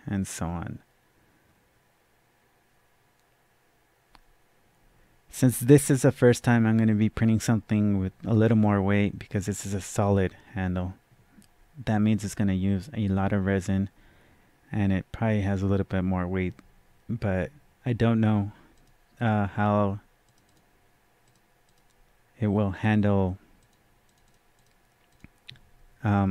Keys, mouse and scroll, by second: 18.7 click, 20.2 click, 20.4 double click, 21.2 click, 22.8 click, 24.2 double click, 24.5 click, 25.0 click.